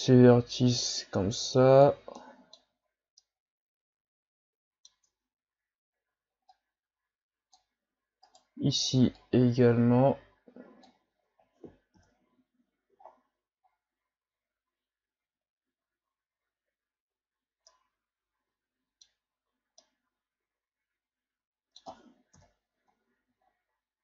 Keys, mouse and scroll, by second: 2.2 middle click, 2.7 Tab, 3.2-5.1 middle drag, 5.1 Tab, 6.5-8.3 drag, 8.3 right click, 9.2-11.1 drag, 11.1 Tab, 11.9 KP_1, 13.0-13.5 shift+scroll up 3, 13.6-14.9 scroll up 2, 17.2-17.5 scroll down 3, 17.7-22.3 middle drag, 22.3 KP_1, 23.5-24.0 shift+scroll up 1.